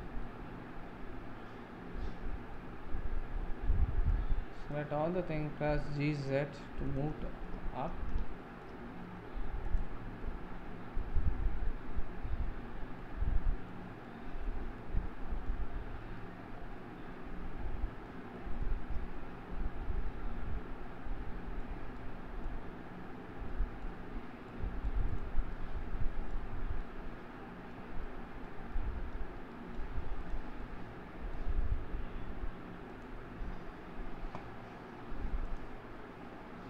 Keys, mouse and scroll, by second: 0.2-2.8 middle drag, 2.8-4.2 scroll down 7, 4.7 click, 5.8 g, 7.2-8.6 middle drag, 8.6-9.4 scroll up 4, 9.8 click, 10.2-12.6 middle drag, 12.6-13.0 scroll up 4, 13.0-24.1 middle drag, 24.1-24.5 scroll up 1, 24.5-25.1 middle drag, 25.1 click, 25.5-26.5 middle drag, 26.5 scroll down 2, 26.8-30.3 middle drag, 30.3-30.6 drag, 30.6-33.0 middle drag, 33.0 click.